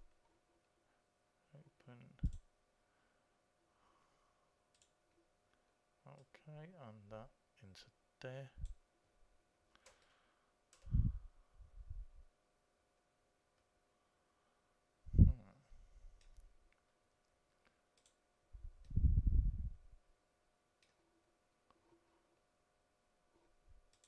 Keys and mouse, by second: 0.0 click, 0.3-1.7 drag, 2.6-4.5 drag, 5.1-8.3 drag, 10.4 middle click, 18.2-20.8 drag.